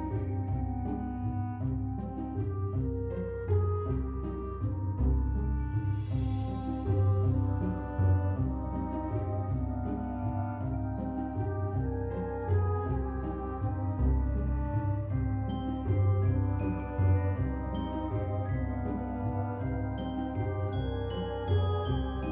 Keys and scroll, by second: 6.5 ctrl+c, 7.7 ctrl+v, 10.6 ctrl+v, 15.7 ctrl+s, 21.1-22.3 typing.